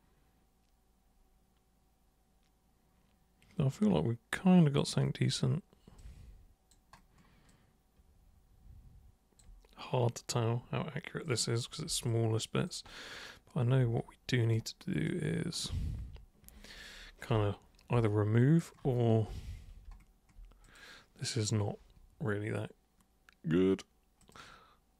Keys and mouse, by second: 6.0 alt+super+click, 7.4-9.4 alt+super+drag, 11.2 super+click, 12.1 alt+super+click, 14.5 super+right click, 20.6 super+click, 24.2 super+click.